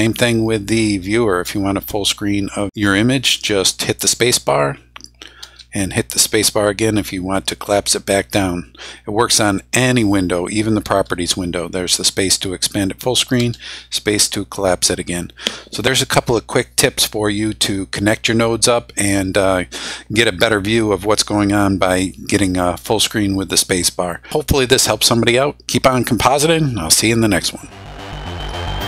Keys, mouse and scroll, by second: 1.3 space, 5.4 space, 10.9 space, 13.4 space.